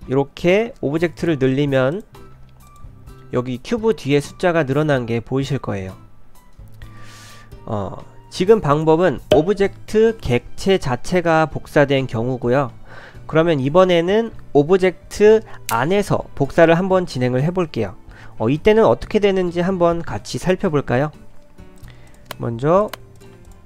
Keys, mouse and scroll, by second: 0.0-2.2 typing, 8.7 click, 21.8 click, 22.1 click, 22.8 click, 23.2 click, 23.5 shift+click.